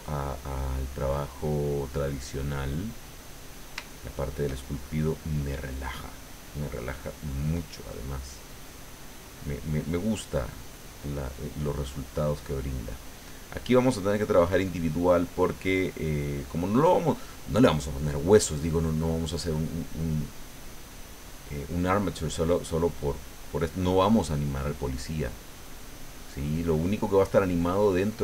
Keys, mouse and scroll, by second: 0.3 middle click, 1.0-2.1 middle drag, 2.3 middle click, 3.3-4.6 middle drag, 5.1-9.3 drag, 10.3 click, 10.9 click, 11.9 click, 12.5 middle click, 13.7 middle click, 14.7-18.9 drag, 19.1 middle click, 20.2 middle click, 21.3 middle click, 22.6-25.3 drag, 25.4 middle click, 26.1 middle click, 26.9 middle click, 27.8 middle click.